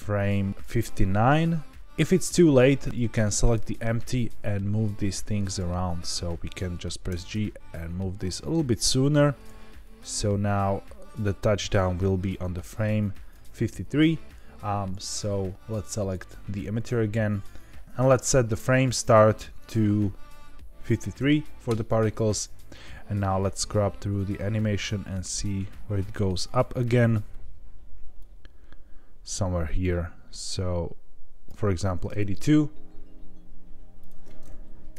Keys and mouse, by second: 1.3 click, 2.9 click, 5.4 click, 7.0 g, 7.3 x, 9.0 click, 9.8-13.3 drag, 15.1 click, 18.6-22.3 drag, 23.3-26.8 drag, 28.2-31.4 drag, 34.1-34.9 drag.